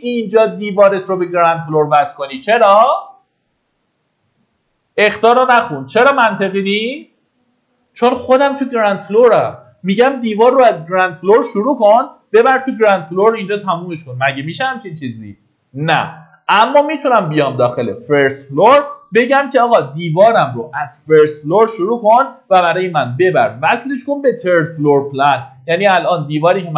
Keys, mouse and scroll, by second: 25.2-25.9 scroll down 1, 26.5 middle click, 26.6-26.7 scroll down 1.